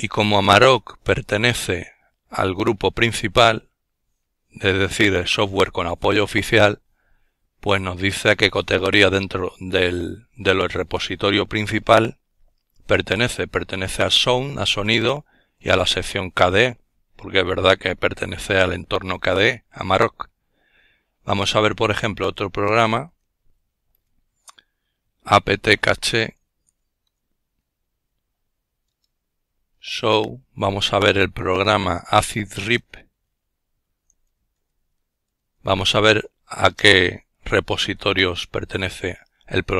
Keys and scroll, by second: 18.4-19.9 typing, 21.4-23.5 typing, 25.4-30.8 typing, 33.8 typing, 35.3-39.7 typing.